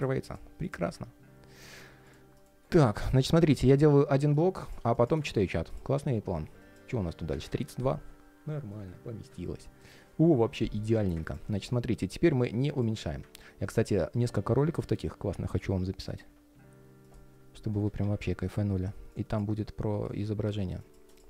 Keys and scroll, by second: 2.4 alt+i, 2.6 super+s, 15.2 super+s, 17.7 alt+a, 18.0 alt+d.